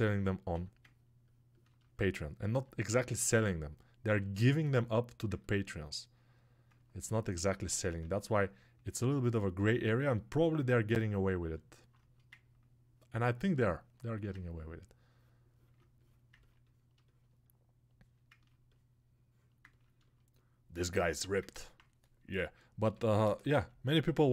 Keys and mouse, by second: 24.1-24.3 alt+right drag.